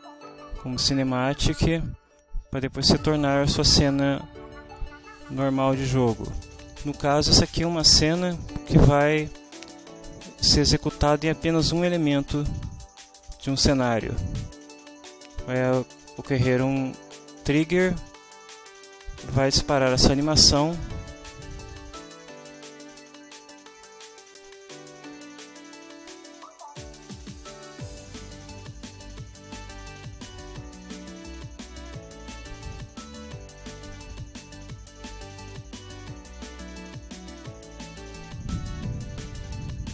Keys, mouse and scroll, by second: 29.3 click, 39.0 5.